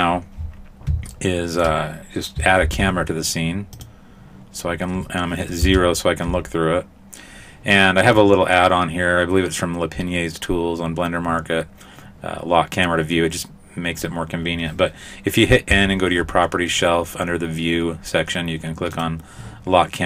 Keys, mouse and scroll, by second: 1.2 shift+middle click, 1.2-2.6 scroll down 1, 2.6 shift+a, 5.6 KP_0, 15.7 n, 19.0 click.